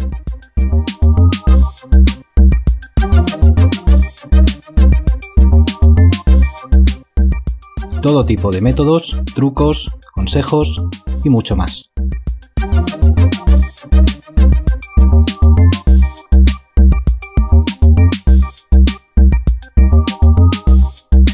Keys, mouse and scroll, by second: 0.6 v, 5.5 ctrl+t, 6.3 shift+click, 11.1 ctrl+alt+click, 11.4 shift+click, 11.8 ctrl+click, 12.0 shift+click, 16.7 F8.